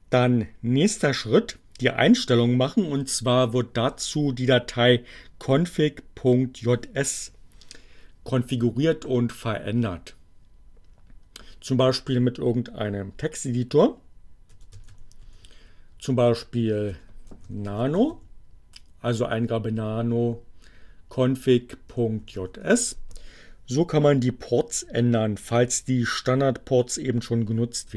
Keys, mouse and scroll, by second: 14.3-15.7 typing, 16.9-18.6 typing, 20.0 ., 22.1-23.0 typing, 27.5 Down.